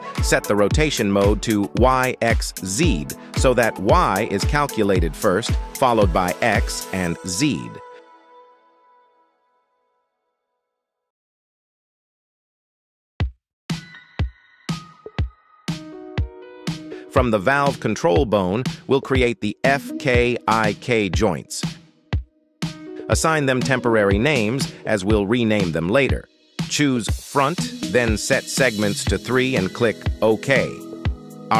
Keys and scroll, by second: 12.8 KP_3, 18.8 g, 19.0 Escape, 24.4 r, 25.2 Return.